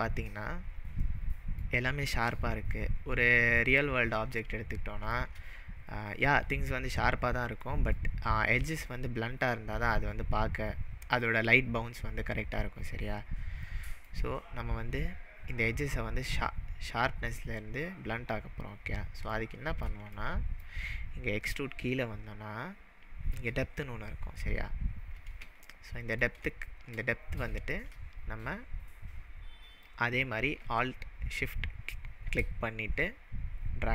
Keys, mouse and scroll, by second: 0.2-1.0 scroll up 6, 1.0-1.6 middle drag, 3.8-4.4 scroll down 2, 4.4-5.2 shift+middle drag, 5.8-6.1 scroll up 3, 7.7-8.2 middle drag, 8.5-10.4 scroll up 3, 13.7-14.2 middle drag, 14.3-16.3 scroll up 4, 18.4-19.2 scroll down 6, 19.4-19.9 middle drag, 21.5 scroll down 1, 25.4 scroll down 1, 25.7-26.2 shift+middle drag, 29.8-33.9 drag.